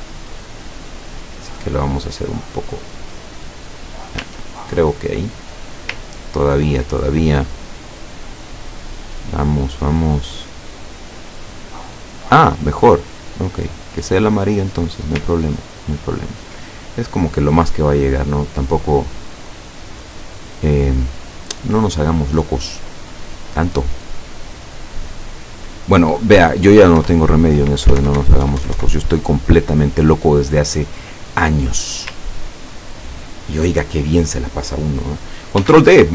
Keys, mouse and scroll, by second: 4.9 click, 6.2-6.8 ctrl+scroll up 2, 7.4 click, 7.9 click, 8.4 click, 9.5 click, 10.3-14.9 drag, 15.7-16.5 ctrl+scroll down 4, 19.0 click, 19.5 click, 25.1 click, 25.6 click, 27.0 Left, 28.0 alt+Right, 32.6 ctrl+scroll down 2, 35.6 ctrl+d.